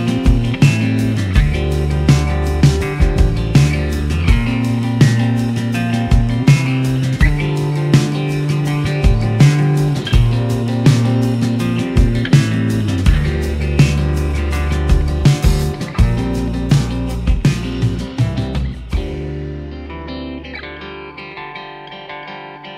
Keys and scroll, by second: 1.7 s, 3.3 s, 3.4 y, 4.6 s, 4.8 y, 9.1 ctrl+shift+z, 14.5 ctrl+z, 14.5 ctrl+z, 14.7 ctrl+z.